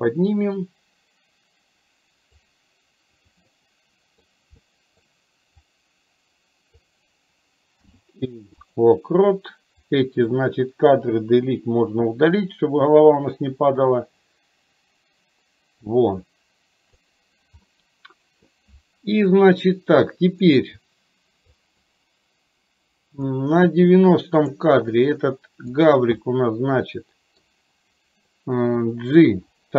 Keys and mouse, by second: 3.6 middle click, 4.6 middle click, 5.9-6.9 drag, 9.9 click, 11.4 Delete, 12.5-17.1 drag, 17.6-18.5 middle drag, 20.1-20.5 middle drag, 21.7 click, 23.4 click, 25.9 drag, 26.4-27.5 middle drag.